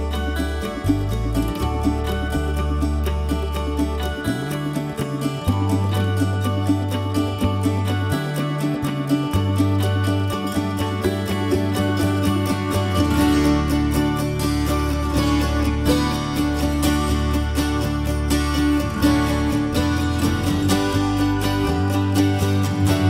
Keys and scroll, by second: 5.1 ctrl+z, 10.2 m, 17.3 p, 19.2 Escape, 22.0 ctrl+g.